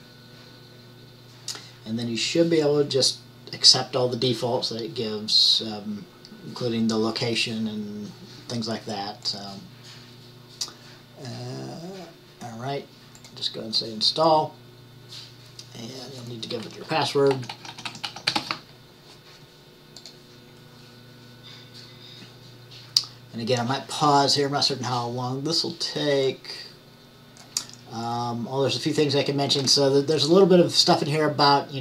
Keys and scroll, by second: 17.4-19.1 typing.